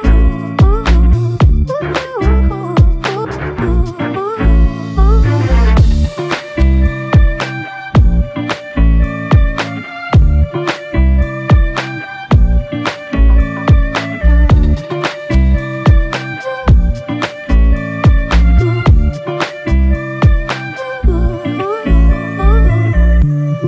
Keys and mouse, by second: 2.4 alt+click, 6.5 f, 7.7 double click, 9.7 shift+click, 10.7 alt+click, 13.2 f, 14.4 alt+click, 19.1 double click, 22.8 f.